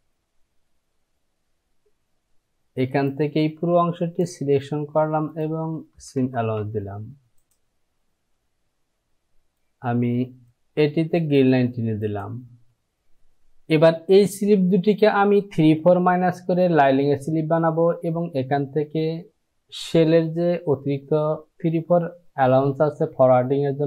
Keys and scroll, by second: 6.0 Down, 6.6 Down.